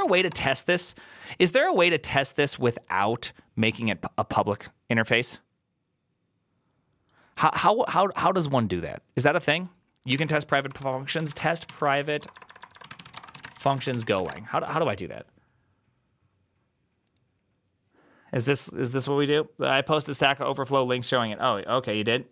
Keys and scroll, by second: 0.0-0.6 typing, 10.7-14.5 typing.